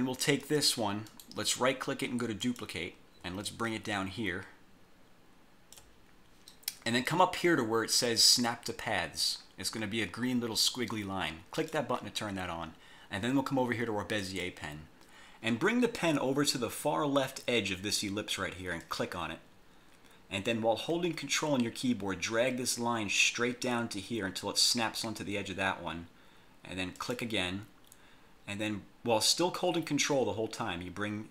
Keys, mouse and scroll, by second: 0.5 click, 1.2 right click, 2.5 click, 3.5-6.1 ctrl+drag, 11.7 click, 14.3 click, 18.9 click, 27.1 ctrl+click.